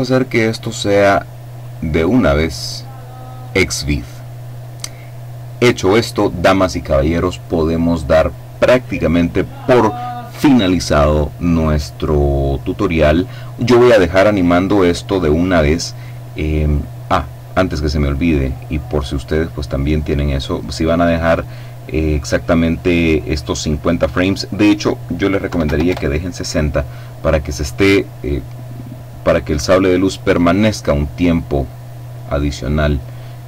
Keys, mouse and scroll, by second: 1.0 click, 2.8 click, 11.7 middle click, 13.7 scroll up 1, 17.4 click, 24.9 KP_6, 25.3 KP_Enter.